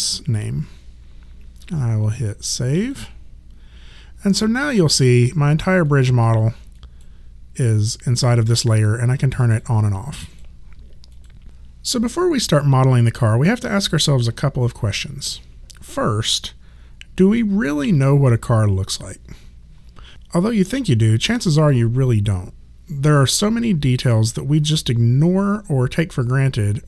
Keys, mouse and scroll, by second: 2.8 click, 5.8 click, 9.4 click.